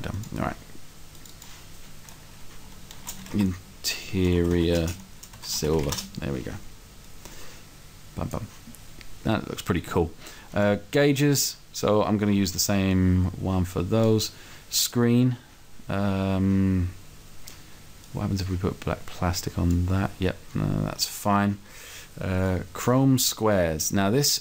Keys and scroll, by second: 3.3-5.7 typing.